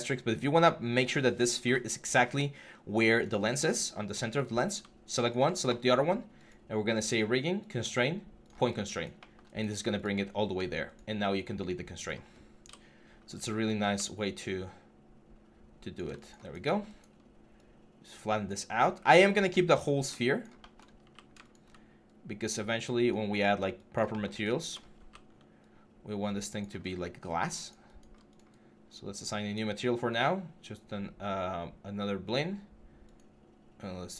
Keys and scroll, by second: 12.4 Delete, 13.6 r, 18.5 w, 23.2 3, 24.8 3.